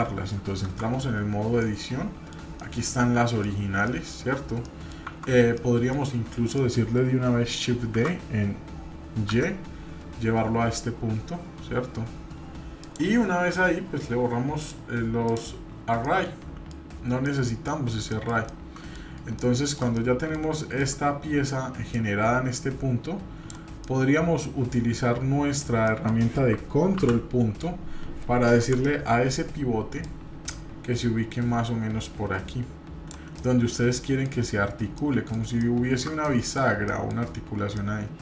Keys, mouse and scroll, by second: 0.6 Tab, 1.6 middle click, 2.6 shift+middle click, 3.5 scroll down 1, 3.9 middle click, 4.7 middle drag, 5.1 Tab, 5.5 scroll down 1, 5.5-5.9 middle drag, 6.5 middle click, 7.9 shift+d, 14.6 click, 15.2 click, 16.0-16.7 middle drag, 16.9 scroll up 1, 17.3-17.7 middle drag, 17.8 scroll up 1, 18.1-19.0 shift+middle drag, 19.3-19.8 shift+middle drag, 19.9-20.4 middle drag, 20.6 shift+middle drag, 21.9-23.5 drag, 23.8-25.0 middle drag, 25.8 middle click, 26.9 ctrl+., 28.5 KP_7, 30.0-33.1 drag, 33.3-34.3 middle drag, 34.5-34.9 scroll up 2, 34.9 middle click, 35.6-36.0 shift+middle drag, 36.2 middle click, 37.0 shift+middle click, 37.4 scroll down 1, 37.8 middle click.